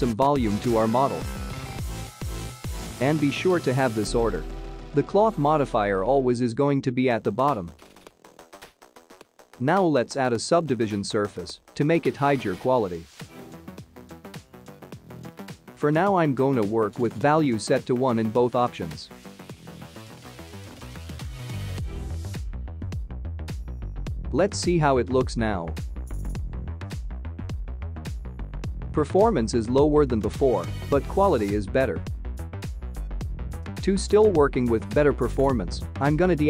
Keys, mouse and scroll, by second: 0.0 click, 4.5 click, 7.2 click, 8.1 middle click, 8.6 scroll down 6, 9.5 click, 13.3 click, 14.3 click, 16.6 click, 17.9 click, 19.4-20.2 scroll down 3, 20.2 click, 21.0 middle click, 22.7 ctrl+s, 25.0 space, 32.8 space, 33.5 click, 34.9 click, 35.2 click.